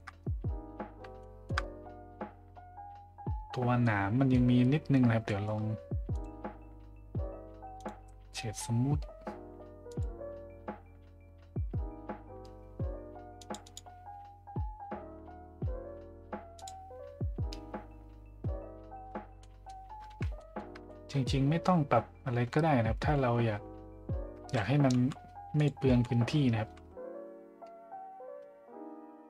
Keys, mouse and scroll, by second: 1.2-1.5 shift+middle drag, 3.8-4.3 middle drag, 5.4 middle drag, 6.2 click, 7.8 click, 9.9 click, 13.4 click, 16.6 click, 19.4-19.7 middle drag, 20.3 shift+middle drag, 25.6 click.